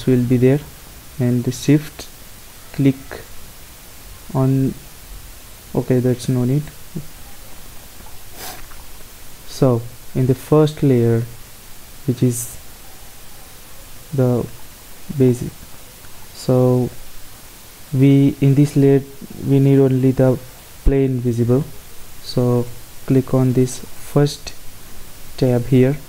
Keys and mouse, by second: 10.4-12.2 drag, 12.2-14.1 middle drag, 18.2-24.0 middle drag, 24.0-25.8 drag, 25.8 middle click.